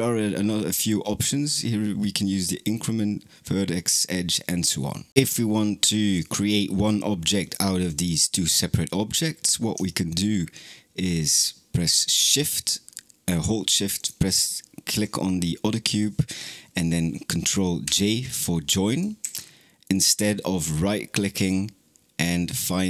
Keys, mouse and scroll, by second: 7.2 click, 7.7 click, 13.8 shift+click, 17.7 ctrl+j, 19.0 ctrl+z, 19.7-22.8 right drag.